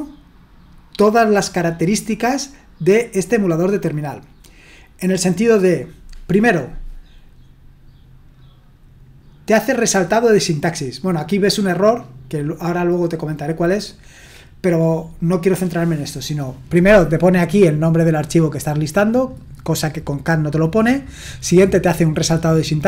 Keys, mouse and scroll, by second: 11.8-16.7 drag, 17.9-21.2 drag.